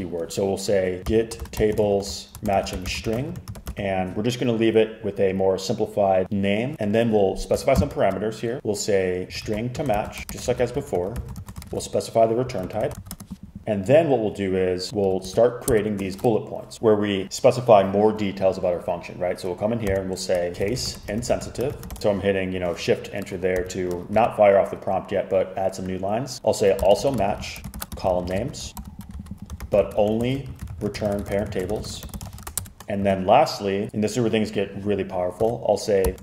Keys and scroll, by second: 0.7-4.3 typing, 7.8 shift+9, 9.0-13.7 typing, 15.3 shift+Return, 15.8 shift+Return, 20.0-22.4 typing, 23.6-24.2 typing, 26.5-33.1 typing, 35.5-36.2 typing.